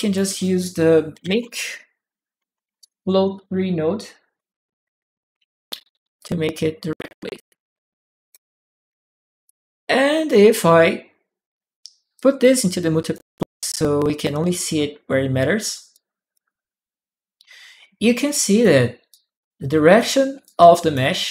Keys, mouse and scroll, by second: 0.6-3.6 typing, 4.1 Return, 4.2 Return, 5.9 click, 7.1 click, 9.2 click, 11.9 click, 13.4 click, 15.7 right click, 16.3-18.4 drag, 18.9 click, 20.2 click, 21.0 click.